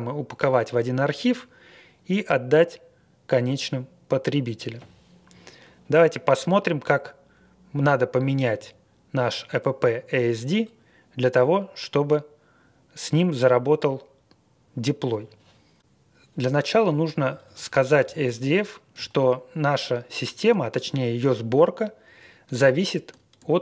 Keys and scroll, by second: 17.1 Page_Up, 17.2 Page_Up, 17.4 Page_Up, 18.0 Page_Up, 18.0 shift+a, 18.2 Return.